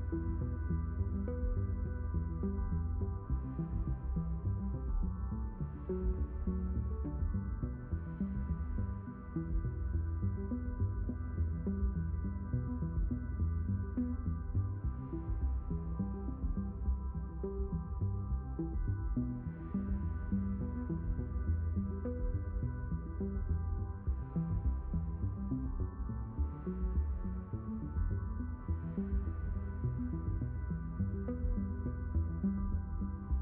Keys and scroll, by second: 7.5 Escape, 18.4 a, 19.1 Return, 30.7 s, 33.1 alt+q.